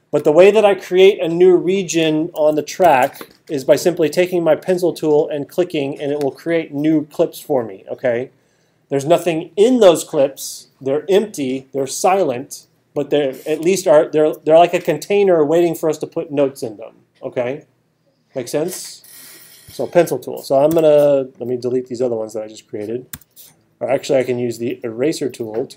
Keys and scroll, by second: 2.8 alt+super+8, 20.7 t.